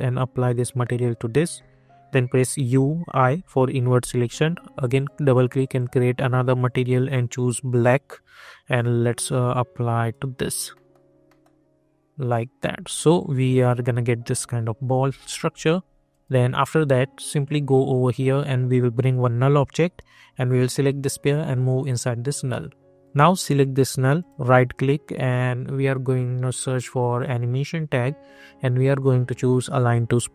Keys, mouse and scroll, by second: 2.7-3.1 typing, 4.7-10.7 drag, 10.7 middle click, 12.2 click, 12.8-14.7 alt+drag, 14.5-15.4 typing, 16.0-23.0 drag, 24.1 right click, 29.8 click.